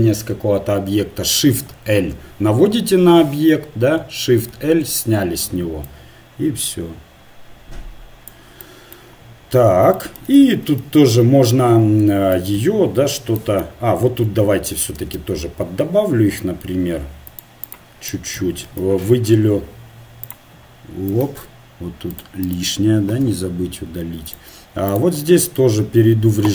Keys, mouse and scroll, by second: 4.5 shift+l, 5.9-7.8 drag, 10.9 ctrl+Tab, 12.6 z, 15.0 ctrl+r, 18.8 ctrl+Tab, 20.6-21.7 drag, 21.7 ctrl+Tab, 22.4 click, 23.3 Delete, 25.2 click.